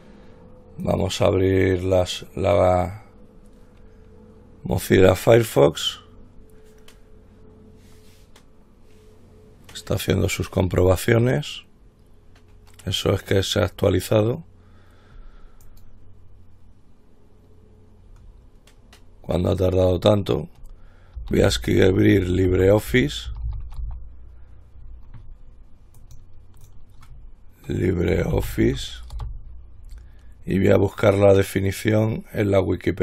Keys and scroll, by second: 21.2-24.5 typing, 28.2-29.4 typing.